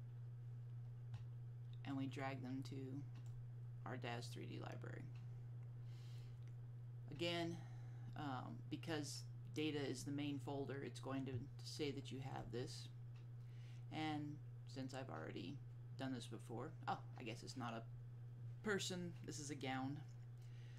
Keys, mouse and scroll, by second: 2.0 click, 12.4 click.